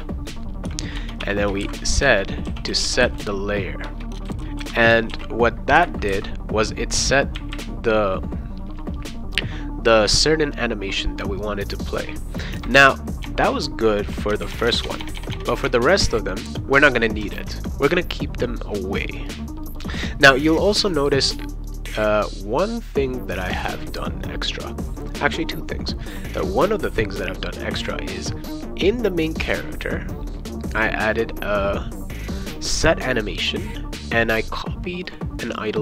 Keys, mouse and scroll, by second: 0.6-5.1 typing, 3.8 Return, 7.3 ,, 13.3 BackSpace, 14.3-15.7 typing, 17.3 ctrl+s, 26.8-28.2 drag, 29.8 click, 34.3 click, 35.1 click, 35.5 click.